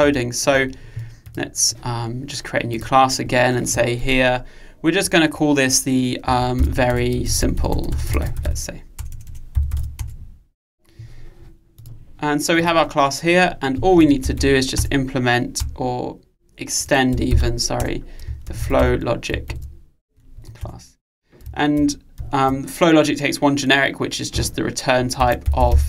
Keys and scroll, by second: 0.1 super+1, 14.8 Return.